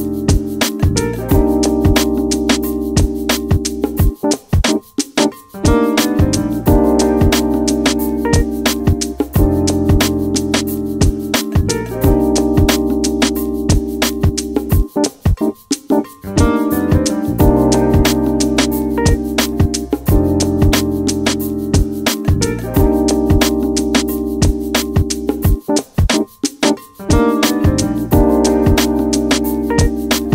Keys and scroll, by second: 2.7-3.6 typing, 4.7-15.7 typing, 17.9-24.0 typing, 25.3-27.2 typing.